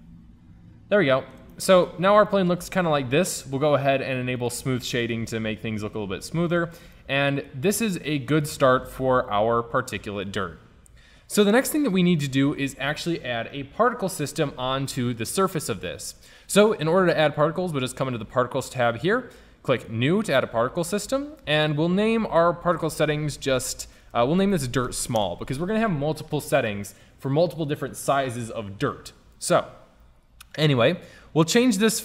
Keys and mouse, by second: 0.1-0.6 middle drag, 0.8 middle drag, 1.2 middle click, 5.6 click, 8.6 middle click, 11.5-23.3 drag, 25.0 l.